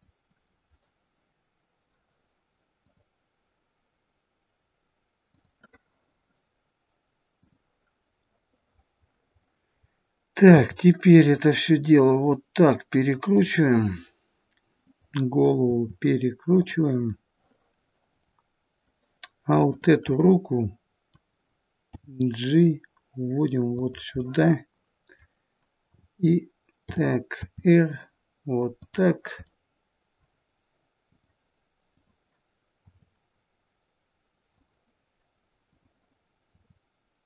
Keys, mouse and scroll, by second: 7.3 click, 8.1 middle click, 9.4 middle click, 10.5 r, 14.9 click, 15.6 r, 17.0 middle click, 19.6 click, 20.1 middle click, 21.8 g, 24.1 middle click, 25.8 t, 26.7 t, 27.3 r, 29.3 middle click, 31.0 click, 31.8 click, 32.7 r, 35.6 click, 36.5 r.